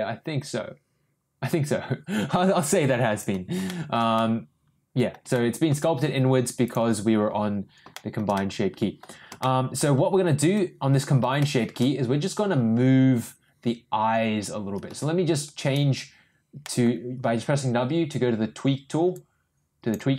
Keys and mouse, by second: 3.6 shift+middle click, 4.1-5.1 middle drag, 5.3-5.7 shift+middle drag, 6.6 click, 7.9 shift+middle click, 8.3 middle click, 9.4-9.8 shift+middle drag, 10.5 Tab, 11.4 middle click, 14.9 w, 15.6 w, 16.6 middle click, 19.2 click.